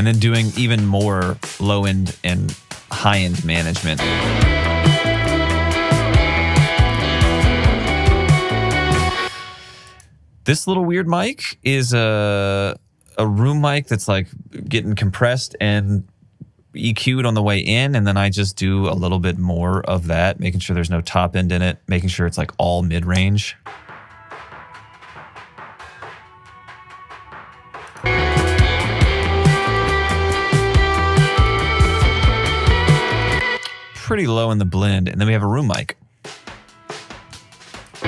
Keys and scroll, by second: 4.8 alt+super+w, 9.0 space, 22.8 alt+super+w, 23.4 space, 33.4 space, 35.6 space.